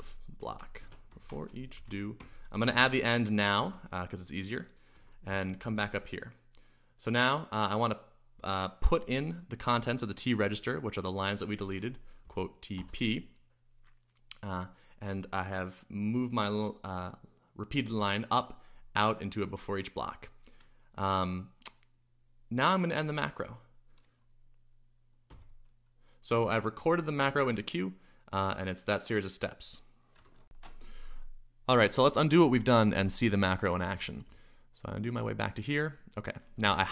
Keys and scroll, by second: 0.0-5.7 typing, 3.6 Return, 4.9 Escape, 11.5-12.7 typing, 25.3 q, 30.4 shift+super+1, 33.9-34.9 typing, 36.4-36.9 typing.